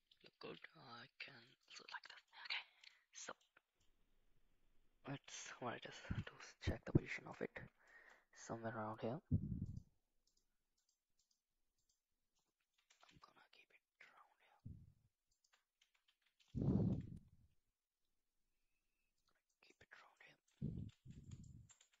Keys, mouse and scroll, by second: 0.4 s, 2.1 middle click, 2.9 middle click, 3.8-5.3 middle drag, 5.9 KP_7, 6.2 shift+z, 7.1 shift+middle click, 7.9 shift+middle drag, 9.7 click, 10.2 click, 10.8 click, 11.2 click, 11.8 click, 12.7 g, 15.8 Tab, 16.0 a, 17.1 e, 20.2 middle click, 20.9 shift+z, 21.5 middle click, 21.8 Tab.